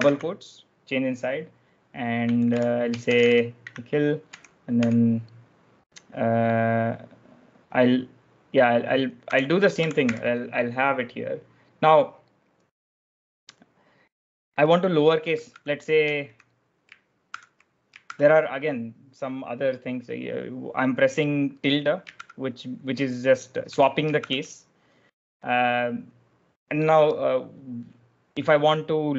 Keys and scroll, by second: 2.2-4.7 typing, 8.9-10.4 typing, 15.4-17.9 typing, 19.1-19.9 typing, 22.1 shift+`, 23.6-24.1 typing.